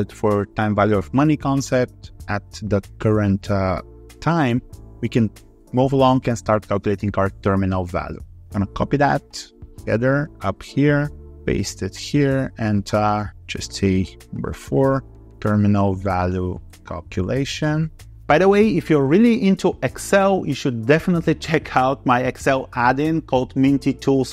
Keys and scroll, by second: 9.6 ctrl+c, 11.2 ctrl+v.